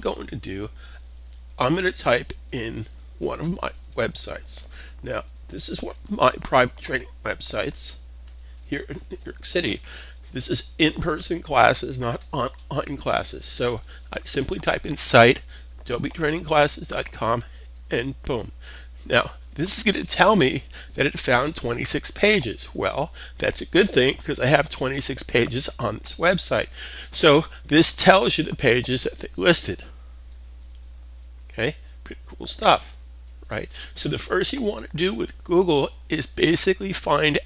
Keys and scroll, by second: 1.1-2.5 typing, 4.1-5.8 typing, 7.7-10.2 typing, 11.5-12.2 typing.